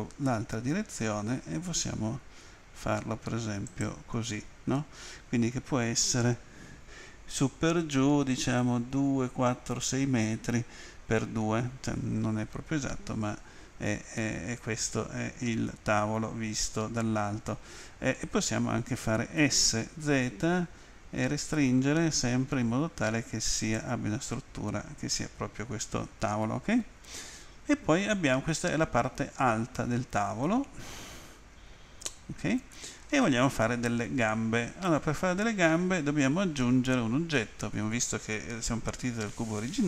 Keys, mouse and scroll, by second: 3.6 ctrl+click, 14.2 middle click, 19.3 s, 20.1 z, 23.6 ctrl+click, 27.2 middle click.